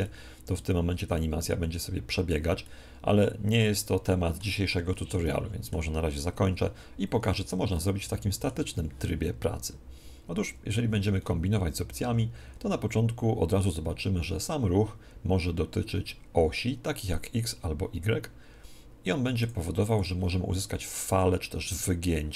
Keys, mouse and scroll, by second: 0.0-6.5 middle drag, 6.1 Escape, 7.7-17.1 middle drag, 17.1 click, 19.4 click, 21.7 middle click.